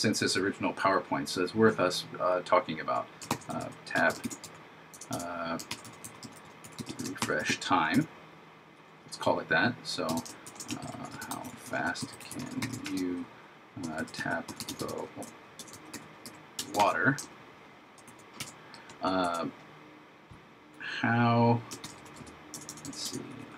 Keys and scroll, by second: 3.4 shift+t, 4.3 shift+s, 5.7 shift+r, 7.2 shift+t, 10.5 shift+9, 10.9 shift+h, 18.1 shift+/, 18.4 shift+0, 21.9 shift+h.